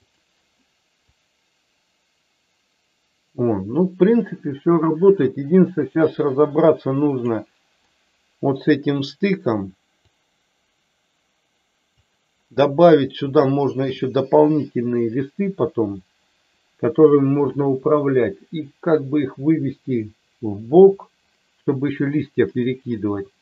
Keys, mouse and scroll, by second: 1.2-7.3 drag, 10.1-11.9 drag, 13.4 shift+middle click.